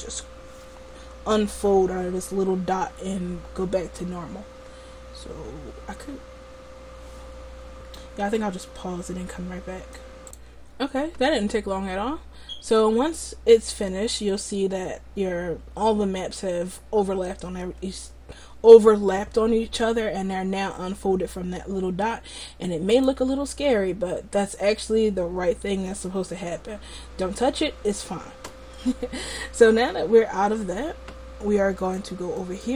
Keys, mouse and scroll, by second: 23.4-29.2 drag, 31.9-32.7 drag.